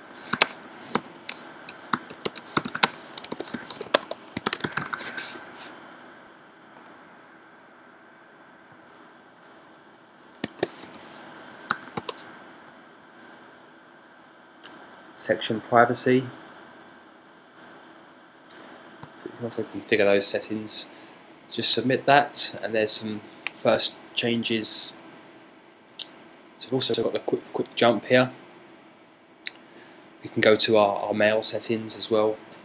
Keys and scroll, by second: 0.0-7.3 typing, 13.7 typing.